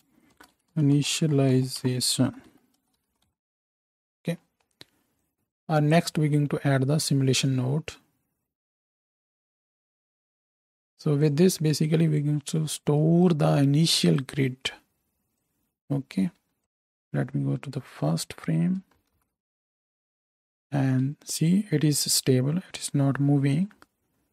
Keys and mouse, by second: 7.1 shift+a, 10.3-11.3 drag, 16.8 z, 19.1 shift+Left, 20.6 space.